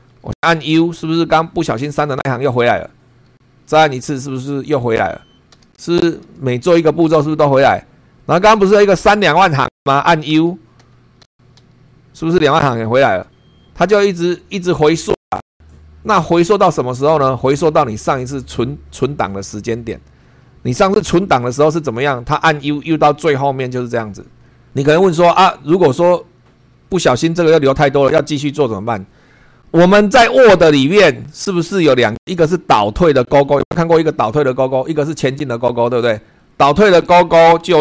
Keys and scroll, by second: 0.0 super+3, 0.7 u, 3.8 u, 5.5 u, 10.3 u.